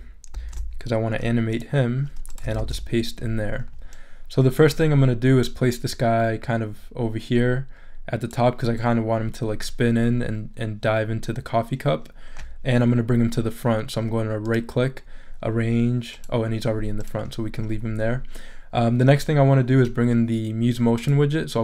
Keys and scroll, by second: 0.3 super+c, 2.6 super+v.